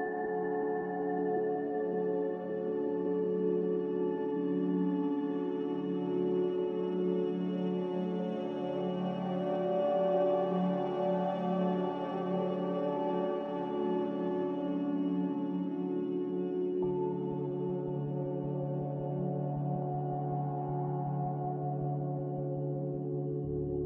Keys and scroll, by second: 0.0 a, 2.2 -, 2.5 1, 2.7 Return, 12.3 b.